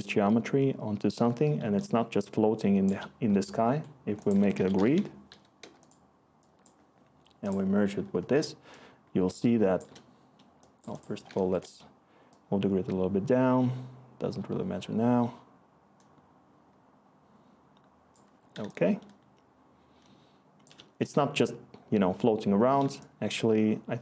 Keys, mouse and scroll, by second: 4.3-5.4 typing, 5.6 Return, 11.4 Return.